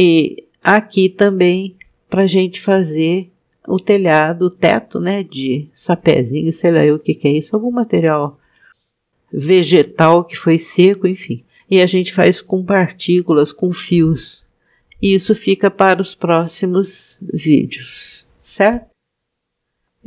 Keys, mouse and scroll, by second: 5.3-6.4 drag, 7.6-9.1 middle drag, 18.7-19.9 middle drag.